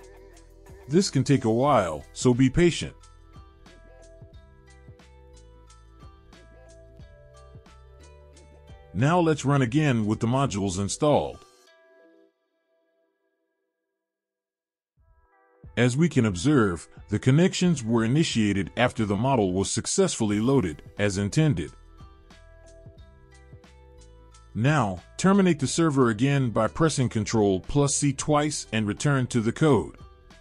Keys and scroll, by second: 10.2 Up, 10.6 Up, 11.5 Return, 26.8 ctrl+c, 27.4 ctrl+c, 29.0 Up, 29.2 Up, 30.3 Down.